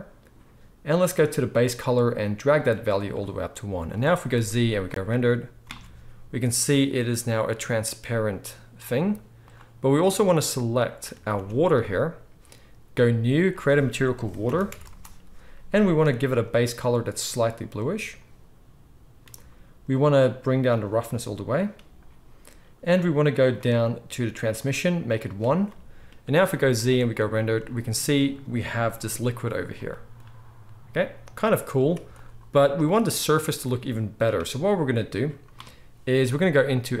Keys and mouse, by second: 1.7-11.8 middle drag, 4.3 z, 5.7 alt+a, 9.0 z, 11.1 ctrl+s, 11.3 ctrl+s, 11.8 click, 12.0-13.0 middle drag, 13.0-16.5 drag, 16.5-20.7 middle drag, 20.7-37.0 drag, 26.3 z, 31.8 z, 33.4 ctrl+s, 33.6 ctrl+s.